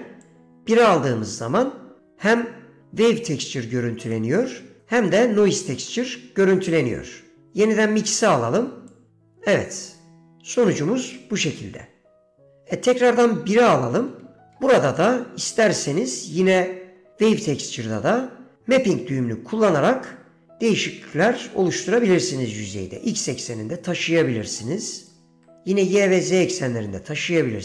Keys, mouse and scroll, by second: 0.4 click, 2.4 middle click, 4.3 middle click, 4.9 middle click, 6.1 click, 6.2 middle click, 9.0-13.1 drag, 13.7 middle click, 15.1 middle click, 18.1 middle click, 20.0-25.3 shift+drag, 25.5 ctrl+z, 26.6 middle click.